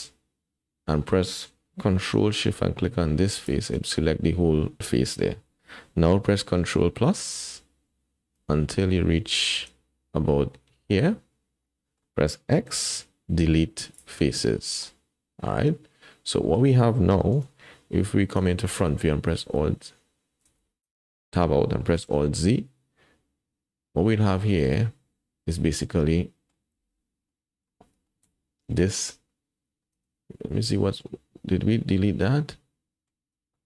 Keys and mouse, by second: 3.3 ctrl+shift+click, 7.1 ctrl+KP_Add, 8.3 ctrl+KP_Add, 9.7 ctrl+KP_Add, 11.7 click, 12.7 x, 14.9 click, 15.1-16.5 middle drag, 17.3 KP_1, 18.5 shift+click, 19.5 alt+z, 20.5 alt+z, 20.8 Tab, 22.2 alt+z, 23.9-26.5 drag, 26.8 alt+z, 27.3 drag, 27.6 middle drag, 28.1 shift+middle drag, 28.8 middle click, 29.9 Tab, 30.5 middle click, 31.9-33.1 drag, 33.5 shift+click.